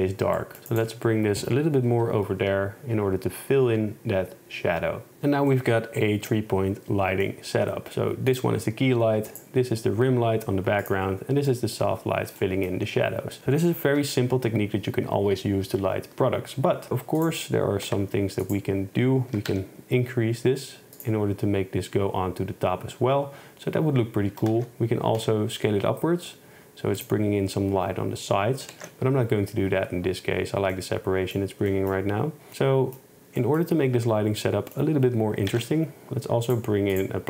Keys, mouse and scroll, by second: 2.0 KP_0, 5.1 a, 9.4 click, 10.9 click, 14.0 KP_0, 17.3 click, 17.9 a, 19.4 s, 19.5 z, 24.4 s, 24.6 x, 25.3 x, 27.0 click, 28.8 ctrl+z, 30.8 click, 32.5 ctrl+s, 34.5 middle click, 35.6 shift+a.